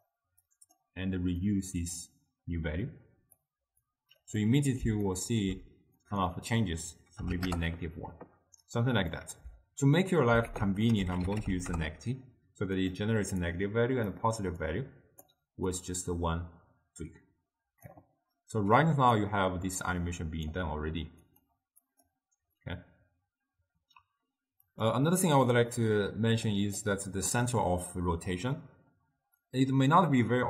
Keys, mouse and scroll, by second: 0.6 click, 1.6-4.0 drag, 4.5 middle click, 5.2 ctrl+middle click, 6.1-9.2 drag, 10.6 ctrl+a, 13.6-18.9 drag, 19.0 d, 19.3-20.6 right drag, 20.6 d, 21.4-25.5 drag, 25.5-26.6 middle drag, 26.6 click.